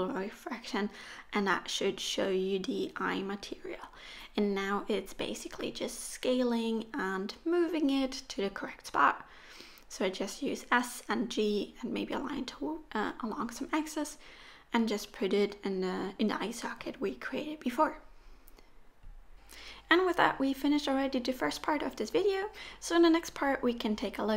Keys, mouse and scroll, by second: 1.6 middle click, 2.8-7.5 typing, 7.1 middle click, 8.1 middle click, 8.3-8.7 scroll up 7, 8.6 middle click, 9.3 scroll up 1, 9.4 click, 9.6 middle click, 10.8-11.8 scroll down 6, 10.9 middle click, 11.4 middle click, 11.8 KP_1, 12.1 scroll up 1, 12.3 shift+middle click, 13.6 click, 13.9 click, 14.3 click, 15.2 click, 15.5 click, 15.9 click, 16.8 middle click, 17.3-18.0 scroll down 2, 17.5 middle click, 18.3-18.6 scroll up 1, 18.6 scroll down 1, 18.7 middle click.